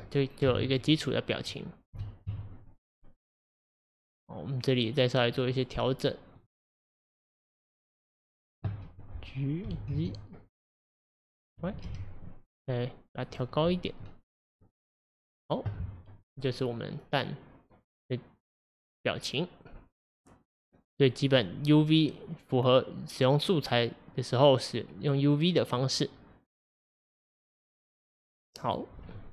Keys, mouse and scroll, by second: 0.5 KP_1, 1.9 KP_1, 2.2 KP_5, 3.5-6.4 middle drag, 6.4 click, 8.3 click, 9.7 g, 14.4-19.3 middle drag, 21.3-24.4 middle drag, 28.7 Left.